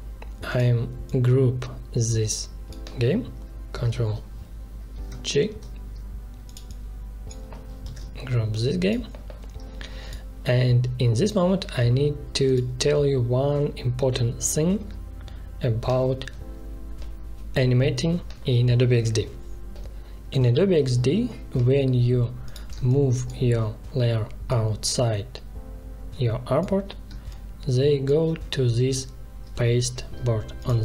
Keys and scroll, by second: 3.7 ctrl+g, 5.2 ctrl+shift+[, 7.8 ctrl+g, 22.7 space, 27.0 space.